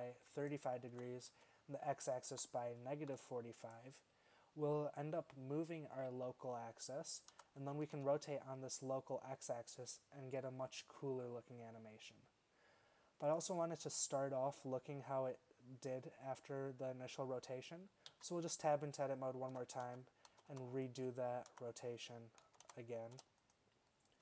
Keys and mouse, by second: 1.0 r, 7.4 r, 18.2 Tab, 19.6 r, 21.6 r.